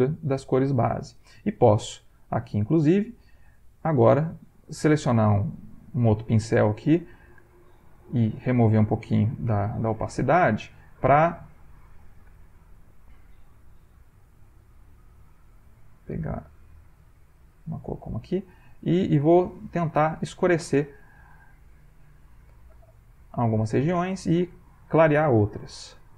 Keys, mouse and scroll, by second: 3.2 ctrl+click, 3.6 ctrl+shift+click, 5.2 click, 6.0-7.9 shift+drag, 8.3 i, 9.3 i, 10.1 ctrl+click, 11.8 ctrl+click, 12.3 ctrl+shift+click, 16.8 ctrl+click, 18.5 click, 18.9 click, 19.3-20.6 drag, 20.9-23.6 drag, 23.8 ctrl+middle click, 23.9 ctrl+click, 25.8 ctrl+alt+v.